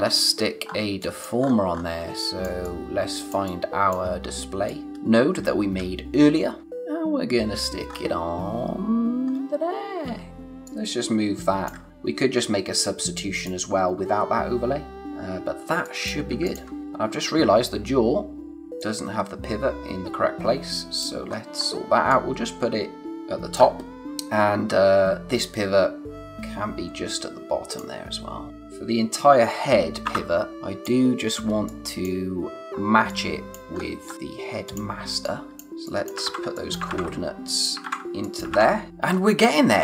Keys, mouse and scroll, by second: 0.5 space, 0.6-0.9 scroll down 1, 0.9 click, 1.0 space, 1.4-2.0 scroll up 1, 2.0 space, 2.1 click, 2.5 space, 4.6 click, 4.9 space, 7.8-8.7 scroll up 1, 8.7-9.3 scroll down 1, 9.3 space, 10.4 click, 15.0 scroll down 1, 15.6 space, 15.8 click, 16.1 space, 16.4 click, 16.8-17.7 scroll up 1, 18.5 click, 21.2-22.0 scroll up 1, 22.0 click, 26.1 click, 28.5-28.8 scroll up 1, 28.8 scroll down 1, 30.0 o, 30.5 click, 30.6 space, 31.6 click, 32.0 space, 32.6 click, 32.8 space, 33.0 click, 33.3 space, 33.7-34.6 scroll up 1, 34.6 click, 36.2 ctrl+c, 36.5 click, 36.8 ctrl+v, 37.4 click, 37.8 ctrl+c, 38.1 click, 38.4 ctrl+v, 38.9 scroll up 1, 39.0-39.6 scroll down 1, 39.6-39.8 scroll up 1.